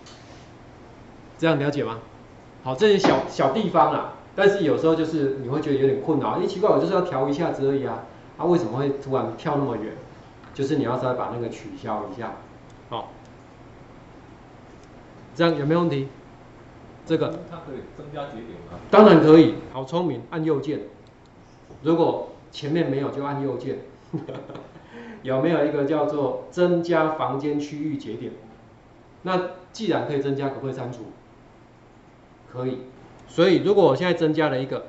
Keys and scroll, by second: 20.1 ctrl+4.